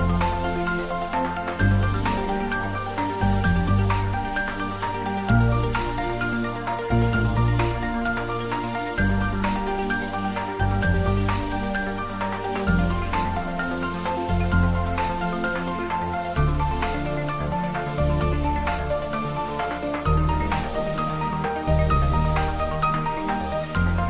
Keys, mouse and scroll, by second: 3.5 click, 9.0 click, 11.6-12.9 scroll up 1, 13.8 Tab, 14.3 click, 16.5 Tab, 17.0 click, 18.0 Tab, 18.3 click, 23.4 shift+click.